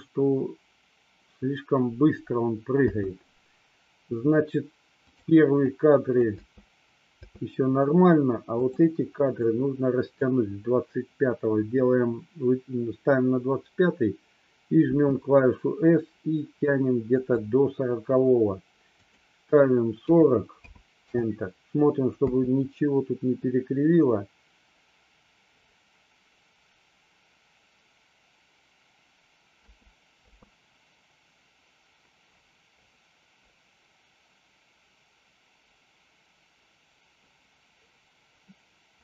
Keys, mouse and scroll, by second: 3.0 space, 5.2 click, 5.7-6.3 drag, 6.5 space, 7.2 space, 8.6 click, 9.5-10.2 drag, 15.0 s, 17.2 click, 19.0-21.2 drag, 22.2 space, 29.7 space, 30.3 space.